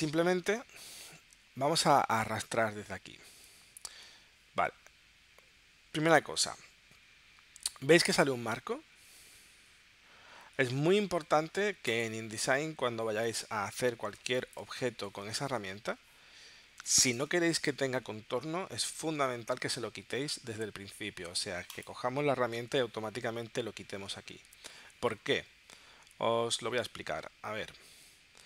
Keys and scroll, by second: 7.6 v, 8.2 v, 14.2 space, 16.8 space, 19.0 super+z.